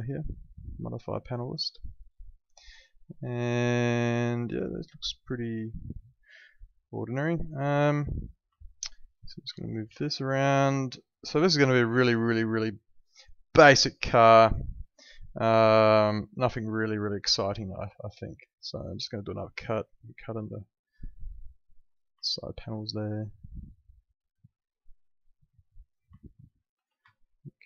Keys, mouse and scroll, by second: 8.2 click, 8.5 alt+middle click, 9.2 click, 9.6 alt+middle click, 9.8 w, 10.4 click, 11.4 alt+middle click, 15.0 click, 21.9 right click, 24.0 click, 25.9 right click, 26.2 alt+middle click, 27.1 alt+middle click.